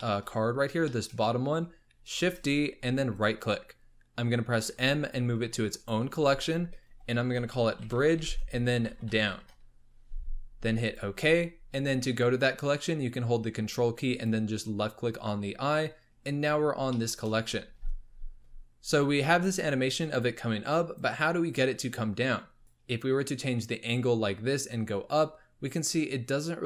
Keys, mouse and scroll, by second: 0.0 shift+middle drag, 0.2-2.2 scroll up 8, 0.8 shift+middle drag, 2.2 shift+d, 4.6 m, 14.1 ctrl+click, 15.8-16.9 scroll down 12, 16.9-19.4 shift+middle drag, 19.4-22.4 drag, 22.5 scroll up 2, 23.6-26.6 drag.